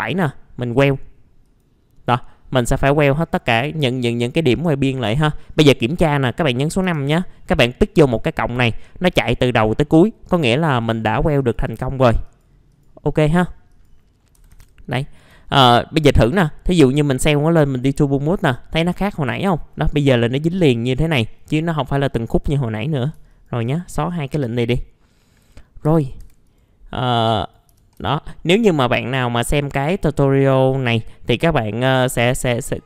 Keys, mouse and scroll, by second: 1.4 click, 5.2 scroll down 1, 5.6 middle click, 6.8 5, 8.0 click, 8.6-8.9 scroll down 1, 10.2 click, 14.2-14.9 scroll up 3, 15.0 alt+middle click, 16.8 click, 18.2-18.6 scroll down 1, 19.1 alt+middle click, 19.5-23.1 scroll up 1, 23.3 shift+click, 23.6 right click, 24.5 click, 25.3 middle click, 25.5 scroll down 1, 25.8 F4, 26.4 right click, 27.4 click, 27.7 f, 28.0 z, 28.4 middle click, 28.9 scroll up 1, 29.3 middle click, 30.7-32.8 drag.